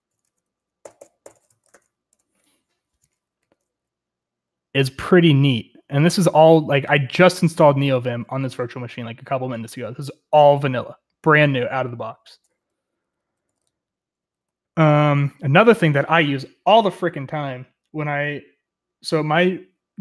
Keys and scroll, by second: 0.3 Escape, 0.8 typing, 3.0-5.4 typing, 13.2 typing, 15.5-16.2 typing.